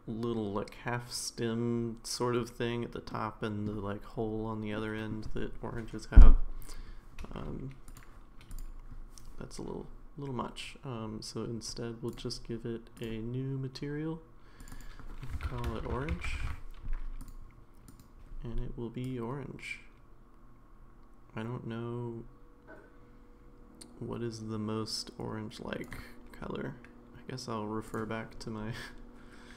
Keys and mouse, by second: 3.1-3.6 middle drag, 4.8-5.1 middle drag, 7.9 click, 12.1 click, 12.9 click, 14.7-17.3 drag, 17.9 click.